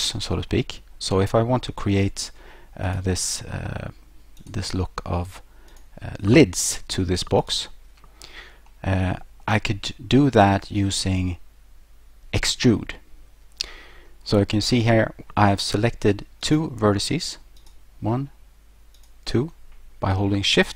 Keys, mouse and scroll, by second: 0.5 middle click, 2.9 right click, 4.4 click, 5.7 right click, 7.4 shift+right click, 8.7 middle click, 14.5 middle click, 16.4 right click, 17.6 right click, 18.9 shift+right click.